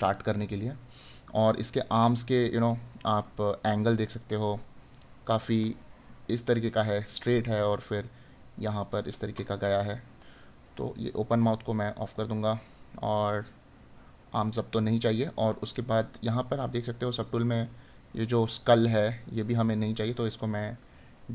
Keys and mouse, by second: 8.7 right click, 18.5 right click.